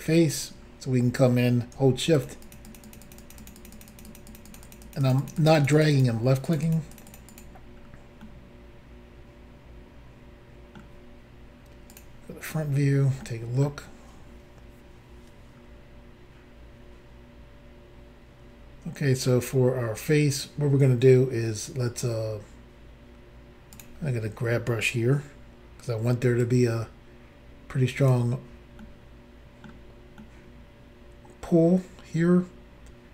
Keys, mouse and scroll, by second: 0.2-0.7 scroll up 3, 2.2 shift+click, 2.2 shift+click, 2.4 shift+click, 2.5 shift+double click, 2.7 shift+click, 2.8 shift+click, 2.9 shift+click, 2.9 shift+double click, 3.0 shift+click, 3.1 shift+click, 3.2 shift+click, 3.3 shift+double click, 3.4 shift+click, 3.5 shift+click, 3.6 shift+click, 3.7 shift+double click, 3.7 shift+click, 3.8 shift+click, 3.9 shift+click, 4.0 shift+double click, 4.1 shift+click, 4.2 shift+click, 4.3 shift+click, 4.4 shift+double click, 4.5 shift+click, 4.6 shift+click, 4.6 shift+click, 4.7 shift+double click, 4.8 shift+click, 4.9 shift+click, 5.0 shift+click, 5.1 shift+double click, 5.2 shift+click, 5.3 shift+click, 5.4 shift+click, 5.5 shift+double click, 5.6 shift+click, 5.7 shift+click, 5.7 shift+click, 5.8 shift+double click, 5.9 shift+click, 6.0 shift+click, 6.5 shift+click, 6.5 shift+click, 6.6 shift+click, 6.7 shift+click, 6.9 shift+click, 7.0 shift+double click, 7.1 shift+click, 7.2 shift+click, 7.3 shift+click, 7.4 shift+double click, 7.8 scroll down 2, 8.2 middle click, 11.9 click, 12.4 scroll up 2, 13.2 shift+middle click, 14.2-14.9 scroll up 1, 15.6 scroll up 1, 23.7 click, 26.4 click, 28.8 middle click, 30.2 middle click.